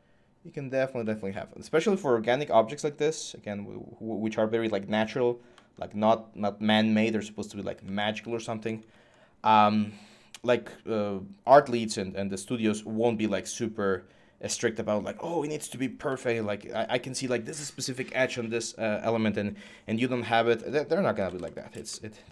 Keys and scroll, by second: 20.7-22.3 typing.